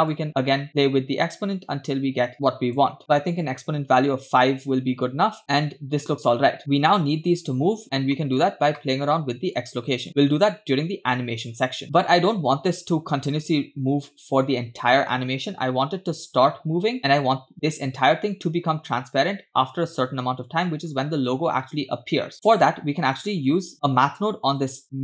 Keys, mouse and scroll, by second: 0.1 shift+click, 1.0-2.9 shift+drag, 3.0 click, 4.9-6.5 scroll down 4, 6.7 middle click, 8.1 middle click, 9.6-15.5 shift+drag, 20.0-20.6 scroll down 2, 20.6 middle click, 22.3-22.6 scroll down 2, 22.3 click, 23.0 middle click, 23.2-23.7 scroll up 2, 24.6 click.